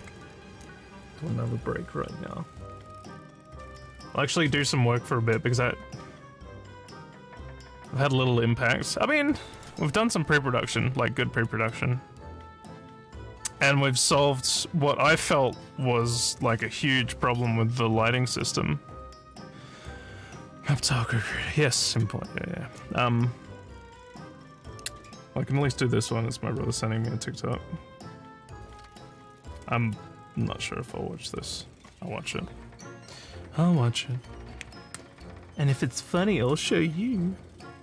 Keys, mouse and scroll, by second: 9.5 click, 10.7 scroll up 1, 11.2 scroll down 1, 15.1 click, 21.8 click.